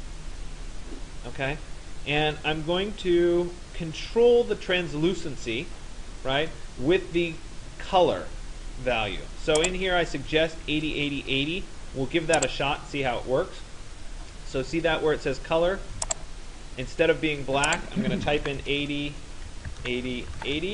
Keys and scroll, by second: 18.0 8, 18.5 0, 19.5 Tab, 19.5-20.7 typing.